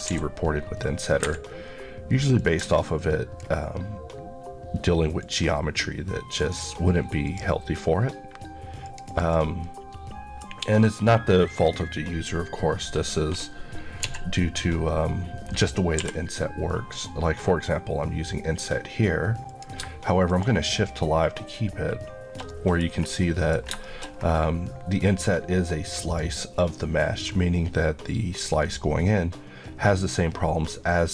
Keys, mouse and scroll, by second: 0.1 d, 0.9 shift+d, 1.2 Escape, 2.4 click, 5.2 ctrl+click, 6.4 ctrl+click, 7.3 ctrl+click, 9.6 middle click, 14.1 z, 16.0 t, 19.5 click, 20.3 shift+click, 22.5 middle click, 22.9-23.2 scroll up 1, 23.2 middle click, 23.9 middle click, 24.1 scroll up 1, 26.6 middle click.